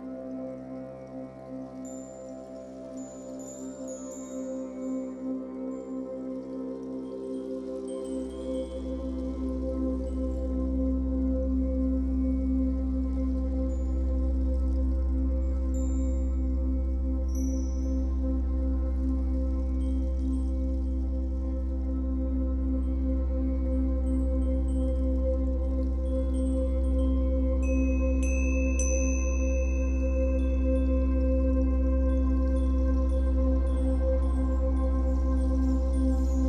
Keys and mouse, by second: 3.8 ctrl+=, 4.8 click, 11.4 click, 15.8 right click, 16.7 click, 21.3 click, 23.9 ctrl+-, 24.5 ctrl+space, 24.6 click, 24.7 ctrl+space, 25.8 0, 25.8 click.